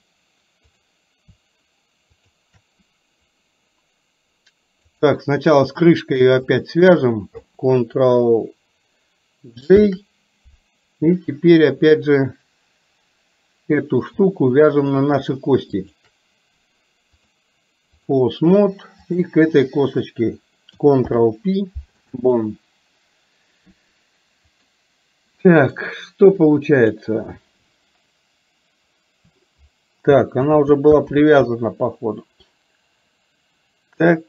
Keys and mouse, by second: 0.7 click, 2.2 shift+click, 9.8 ctrl+j, 15.8 shift+click, 17.4 click, 19.1 click, 21.2 ctrl+p, 30.6 ctrl+z, 31.2 ctrl+z.